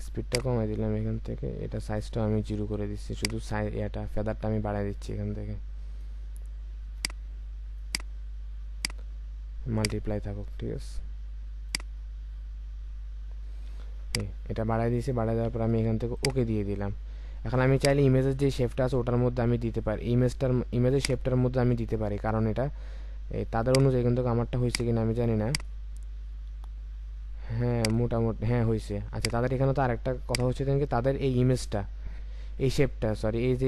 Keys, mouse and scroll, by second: 12.2-12.7 scroll up 1.